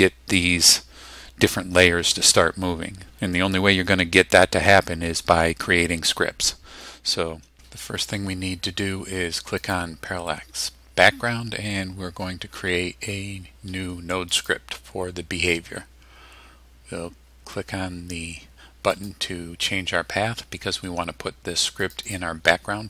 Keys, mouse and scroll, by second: 9.6 click, 14.3 click, 18.9 click, 21.8 click.